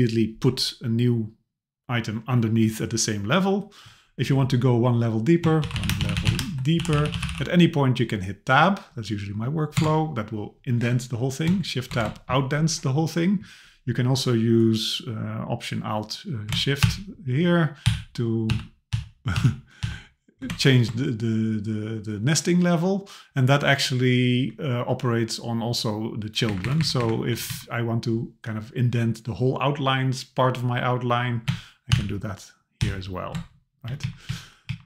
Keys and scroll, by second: 9.8 Tab, 11.9 shift+Tab, 16.8 alt+shift+., 17.9 alt+shift+,, 18.5 alt+shift+., 18.9 alt+shift+,, 19.4 alt+shift+., 19.8 alt+shift+,, 26.5 Up, 27.3 Left, 31.9 alt+shift+., 32.8 alt+shift+,, 33.9 Down.